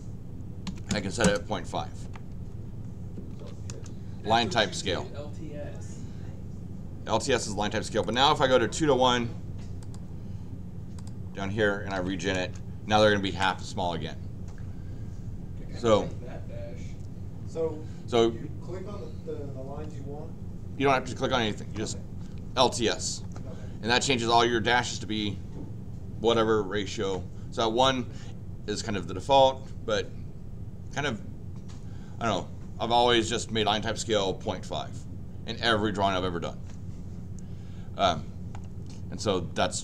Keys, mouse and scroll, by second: 3.1-3.9 typing, 8.0 click, 10.9 click, 11.6-12.4 typing.